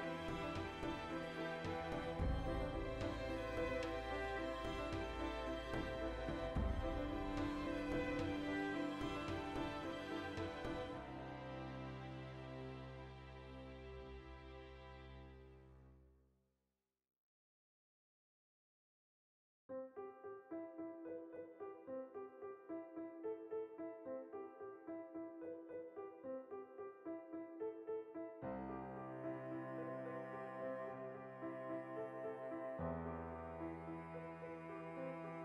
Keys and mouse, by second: 0.0 ctrl+b, 1.3 click, 1.5 alt+right click, 1.7 ctrl+middle click, 2.3 alt+shift+right click, 2.6 ctrl+x, 3.2 click, 3.5-5.4 middle drag, 5.4 alt+right click, 5.8 alt+shift+right click, 6.2 alt+q, 6.5-8.1 ctrl+shift+middle drag, 7.5 r, 8.1 click, 8.3 g, 8.9 ctrl+b, 9.7 click, 9.8 alt+right click, 10.1 middle click, 10.6 alt+shift+right click, 11.0 ctrl+x, 11.2-16.5 ctrl+middle drag, 12.8 Tab, 16.5 right click, 16.7-17.0 shift+middle drag, 17.0 right click, 17.3-19.0 ctrl+middle drag, 18.1 Tab, 18.8 2, 19.0 right click, 19.2-20.7 shift+middle drag, 20.7 right click, 21.7 click, 22.7 shift+right click, 23.2 ctrl+right click, 24.1 middle click, 24.5 Tab, 24.6 right click, 24.8 Tab, 25.2 right click, 25.4 middle click, 25.9 3, 26.0 right click, 26.7 ctrl+right click, 26.8-28.4 shift+middle drag, 28.4 ctrl+right click, 28.7-30.3 middle drag, 30.3 ctrl+right click, 30.5-31.9 middle drag, 31.8 shift+d, 31.9 right click, 32.0-34.3 ctrl+middle drag, 33.0 alt+q, 33.7 e, 34.3 click, 34.9 s.